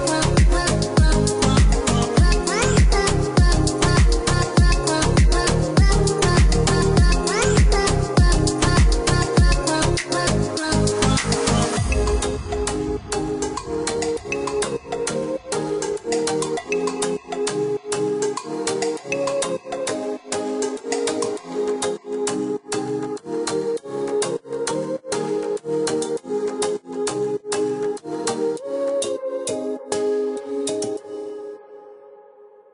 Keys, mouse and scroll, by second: 0.2 KP_Decimal, 0.5 KP_5, 0.9 KP_Enter, 3.1 click, 4.7 click, 7.3 click, 9.2 middle click, 12.1 click, 12.8 click, 13.7 middle click, 14.3 space, 15.1 click, 20.8 click, 24.9 click, 27.7 scroll down 1, 29.1 click, 31.6 KP_0, 31.8 KP_Decimal, 32.0 KP_0, 32.6 KP_Enter.